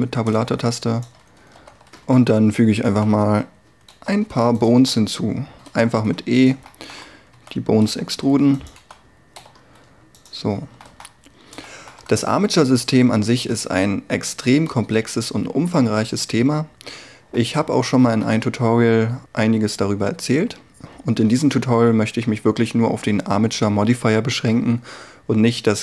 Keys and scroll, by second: 1.6 z, 2.9 e, 4.0-9.5 typing, 13.6 Tab.